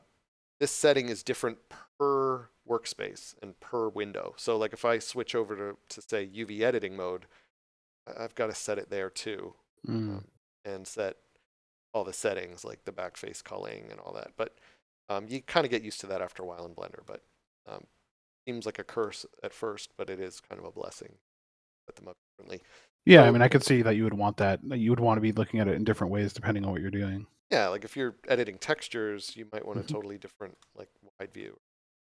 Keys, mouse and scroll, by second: 8.6 click, 9.6 2, 10.3 Return, 11.8 scroll down 1, 12.4 click, 16.9 middle click, 17.9 scroll down 1, 18.9 middle click, 20.4 scroll up 1, 20.8 middle click, 24.6 scroll up 1, 31.5 scroll up 1, 32.0 middle click.